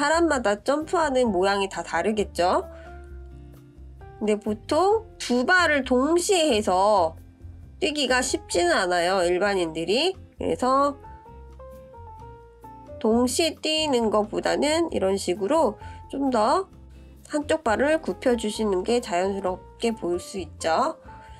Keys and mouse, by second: 2.1 shift+click, 2.8 shift+click, 3.5-7.9 drag, 9.0-10.4 drag, 11.3-11.8 shift+middle drag, 12.8-17.1 drag, 17.7 click, 18.3-21.3 drag.